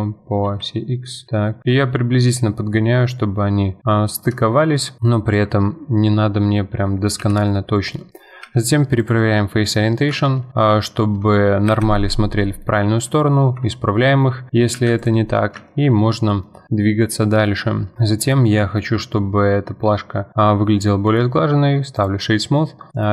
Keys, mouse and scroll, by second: 4.6-5.2 scroll down 5, 5.0 middle click, 5.4 Tab, 5.6-6.7 middle drag, 6.7-7.2 scroll down 1, 7.2 KP_7, 8.0-8.4 middle drag, 8.4 q, 9.4-10.1 middle drag, 10.1 Tab, 11.7 shift+n, 12.6 middle click, 13.6 Tab, 13.9-14.5 middle drag, 14.5 scroll up 1, 14.7 q, 15.3-17.3 middle drag, 17.3-17.9 scroll down 2, 17.9-19.7 middle drag, 21.1-23.1 right drag.